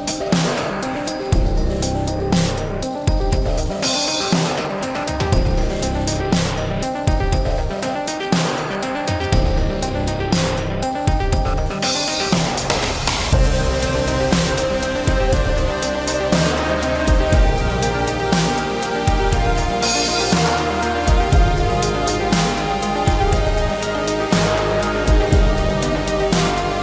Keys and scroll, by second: 11.4 shift+space, 11.7 Escape, 24.8 Delete, 26.0 shift+x.